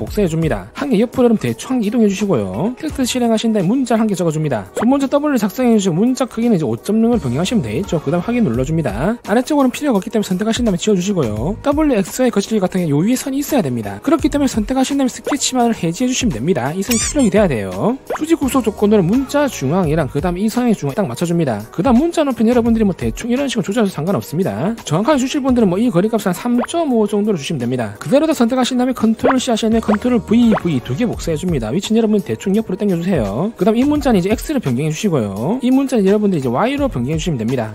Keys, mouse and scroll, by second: 0.2 ctrl+v, 0.6 click, 1.3 click, 2.4 middle click, 3.4 t, 4.2 click, 6.1 w, 6.8 click, 7.9 click, 10.4 click, 13.3 click, 16.6 click, 18.3 click, 23.0-24.7 drag, 24.9 d, 25.2 click, 26.2 click, 26.5 click, 27.1 3, 27.8 5, 28.3 click, 29.7 ctrl+c, 30.6 ctrl+v, 30.9 ctrl+v, 31.7 scroll up 2, 32.8 click, 34.3 click, 34.5 click, 34.6 click, 35.8 click, 36.0 click, 36.1 click, 37.3 click.